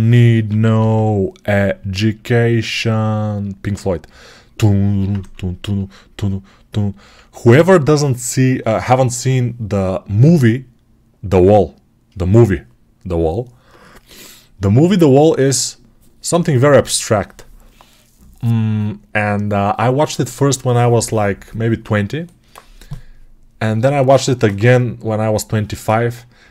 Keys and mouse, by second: 0.3 p, 0.6 ], 0.8 ], 3.1 alt+click, 3.8 right click, 3.9 alt+click, 4.1-26.5 right drag, 5.0 2.